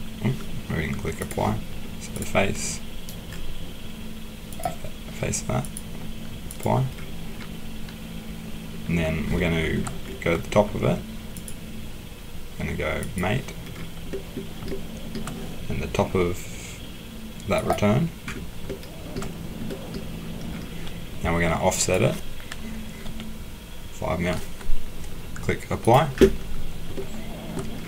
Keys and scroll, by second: 23.0 5.